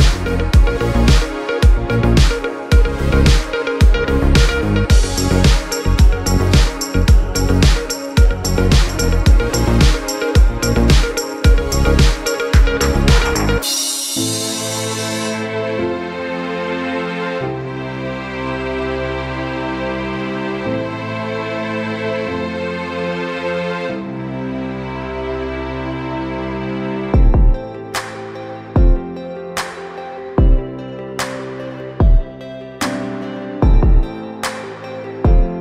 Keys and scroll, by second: 2.4 6, 3.1 Return, 27.6 -, 28.4 2, 29.0 Return, 30.7 c, 32.6 v.